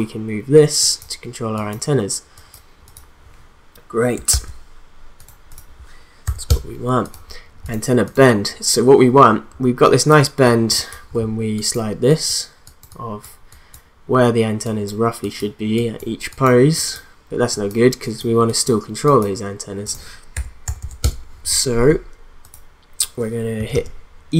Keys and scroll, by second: 4.3 ctrl+z, 6.2 0, 6.5 Return, 20.3 1, 20.6 0, 21.0 Return, 23.6 e.